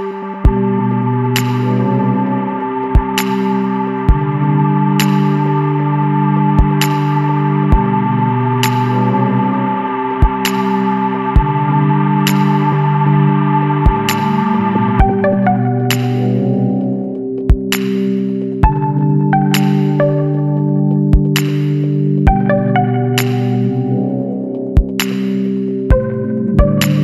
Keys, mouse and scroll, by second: 1.8 click, 3.7 click, 6.9-7.9 scroll down 3, 9.8 click, 12.4 click, 14.2 click, 15.4 click, 17.0 click, 18.6 click, 19.8 KP_1, 20.1 KP_9, 20.6 KP_5, 21.2 KP_Enter, 22.3-22.7 scroll down 1, 22.9 scroll down 1, 25.9-27.0 drag.